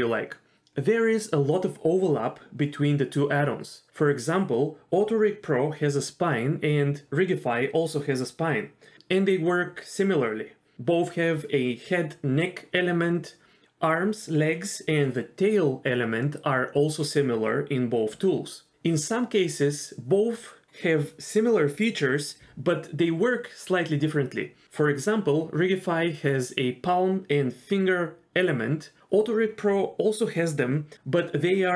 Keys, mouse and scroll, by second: 9.1 shift+middle click, 10.0-11.6 scroll up 4, 11.6 click, 12.2 g, 17.6 KP_1, 18.2-19.2 scroll down 7, 18.5 shift+middle click, 18.9 shift+middle click, 19.2 shift+middle click.